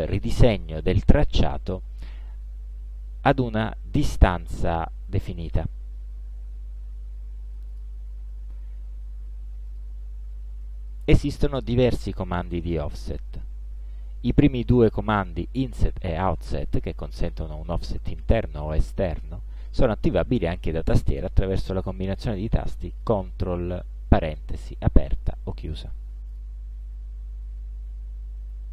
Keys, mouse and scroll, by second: 7.8 click, 9.7 click, 26.4 click, 28.6 ctrl+8.